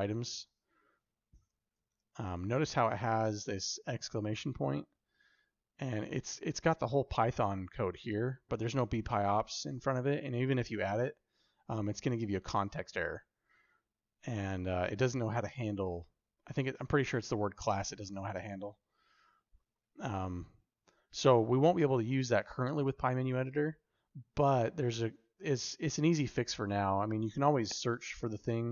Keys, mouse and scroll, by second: 1.6 shift+u, 21.4 click, 22.7 g.